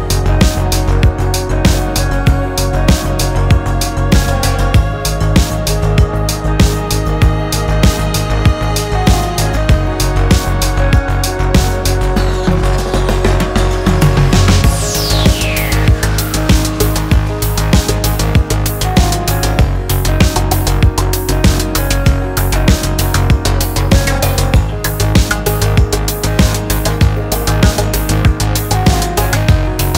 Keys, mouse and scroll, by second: 0.0-2.1 typing, 0.2 click, 1.0 click, 1.6 scroll down 2, 1.8 scroll up 2, 2.0 click, 2.3 Tab, 2.4 scroll down 1, 2.6 shift+middle click, 2.9 scroll up 4, 3.0 middle click, 3.2 Tab, 3.3 middle click, 3.4 3, 3.5 middle click, 3.6 g, 3.9 shift+click, 4.0 middle click, 4.1 g, 4.4 middle click, 4.6 scroll down 3, 4.8 middle click, 4.9 Tab, 4.9-5.2 middle drag, 5.2-29.9 typing, 5.4-5.7 scroll up 5, 5.5 Tab, 5.5 shift+middle click, 5.7 shift+middle click, 6.1 scroll down 9, 6.6 shift+middle click, 7.4 middle click, 8.0 click, 8.7 scroll up 3, 8.7 shift+middle click, 9.2 shift+middle click, 9.8 shift+middle click, 10.6 middle click, 10.9-11.3 scroll up 2, 11.0 shift+middle click, 11.4 middle click, 11.8 middle click, 12.0 shift+middle click, 12.1 scroll up 2, 12.2 shift+middle click, 12.3 scroll down 2, 12.4 middle click, 13.1 alt+click, 13.9 alt+click, 14.2 shift+middle click, 15.0 alt+click, 15.0 shift+middle click, 16.1 shift+middle click, 16.3 click, 16.4 middle click, 16.8 shift+click, 16.9 middle click, 17.1 scroll up 1, 17.2 ctrl+r, 21.6 scroll down 1, 22.4 scroll down 2, 22.4 shift+middle click, 22.6 middle click, 23.3 middle click, 24.2 scroll up 3, 24.3 shift+middle click, 25.5 middle click, 25.8 shift+middle click, 26.5 alt+click, 26.9 shift+middle click, 27.0 scroll up 1, 29.1 scroll down 1, 29.4 scroll up 3, 29.4 middle click, 29.5 alt+shift+click, 29.8 scroll down 1, 29.8 shift+middle click.